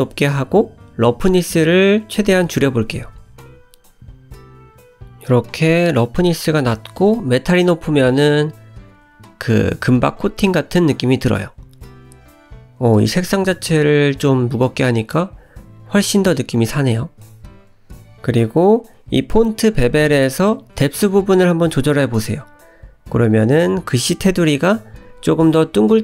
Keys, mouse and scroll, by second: 0.0 scroll up 2, 0.3 shift+middle click, 0.7 click, 1.7 middle click, 2.8 click, 5.2 click, 7.1 middle click, 9.1 click, 10.9 click, 11.7-13.7 scroll down 1, 13.7 middle click, 14.7-15.6 scroll up 1, 15.6 click, 16.7 click, 17.8-19.3 scroll down 4, 20.8 shift+click, 23.6-24.2 scroll up 3, 24.2 shift+middle click, 24.7 scroll up 1, 25.9 shift+click.